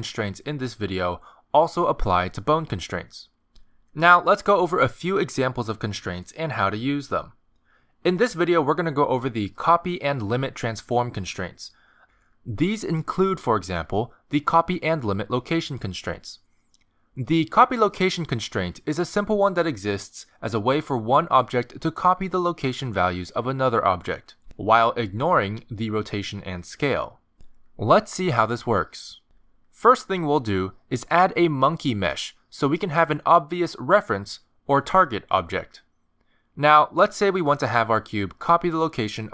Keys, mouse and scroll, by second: 0.8 click, 1.6 click, 2.9 click, 5.5 ctrl+Tab, 5.9 x, 6.9 click, 15.0 click, 16.0 click, 23.8 click, 26.3 click, 27.3 r, 27.7 s, 29.8 ctrl+z, 31.5 click, 36.0 g, 37.0 r, 38.1 r.